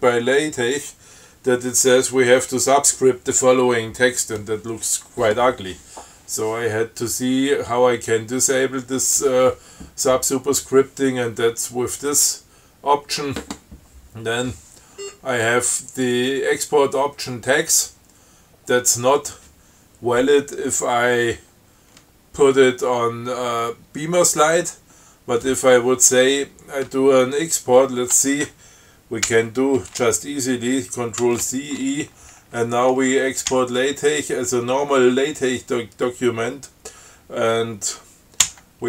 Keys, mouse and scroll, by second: 14.7 scroll down 2, 15.2 scroll up 2, 29.5 ctrl+c, 31.5 ctrl+e, 33.8 l, 38.7 o.